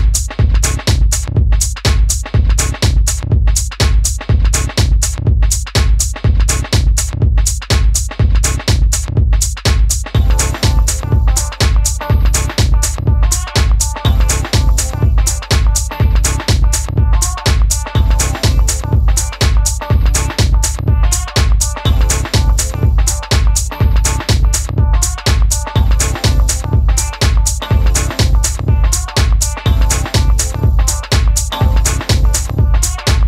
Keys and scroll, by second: 1.0 Left, 1.1 Left, 1.2 Left, 1.3 Left, 1.4 Left, 3.8 super+d, 4.3 BackSpace, 7.3 super+d, 8.3 Down, 8.3 Down, 8.4 Down, 8.5 Down, 8.7 Down, 8.9 Down, 31.8 Page_Down.